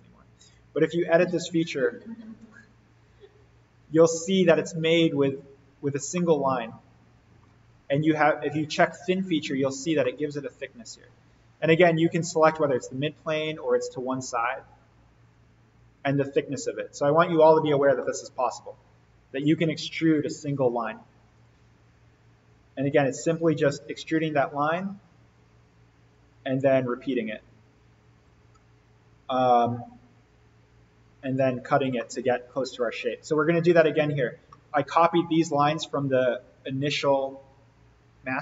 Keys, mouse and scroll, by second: 2.4 right click, 3.7 click, 6.0-6.3 scroll down 1, 6.3-7.6 middle drag, 8.8-10.0 scroll down 1, 10.0-11.2 middle click, 12.2 click, 16.6-18.0 scroll up 1, 18.0-19.5 middle click, 18.2-19.5 scroll up 1, 21.3 click, 24.0-24.6 drag, 29.8-31.6 scroll up 1, 31.8 scroll down 1, 31.9-32.6 middle drag, 33.3 click, 34.0 scroll up 1, 34.4-35.1 middle drag.